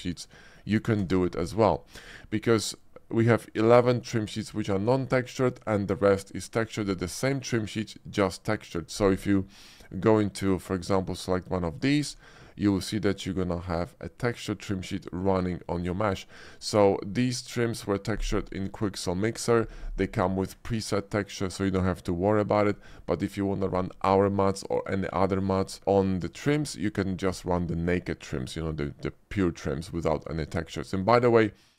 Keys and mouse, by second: 0.3 Tab, 0.5 middle click, 1.1 d, 26.5 Tab.